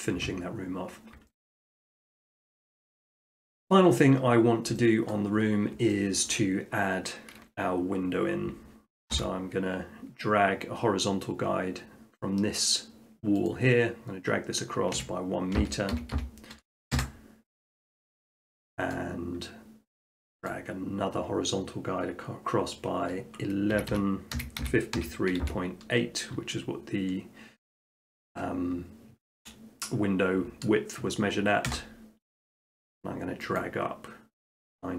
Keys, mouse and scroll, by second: 0.6 middle click, 1.4 shift+middle click, 1.5 shift+middle click, 2.1 middle click, 2.6 middle click, 5.1 middle click, 5.4 middle click, 5.6 middle click, 6.3 shift+middle click, 6.5 middle click, 9.2 t, 13.5 click, 14.9-15.6 typing, 17.0 Return, 18.2-20.0 middle drag, 20.5-21.7 drag, 23.7-25.5 typing, 31.7 Return, 33.6-34.7 drag.